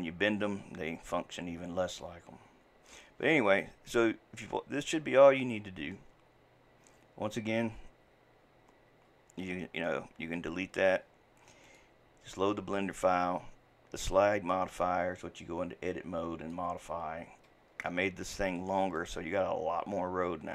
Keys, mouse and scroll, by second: 8.0 Delete, 9.8 click, 10.2 Delete, 11.7 click, 15.9-17.9 drag, 17.9-20.5 shift+middle drag.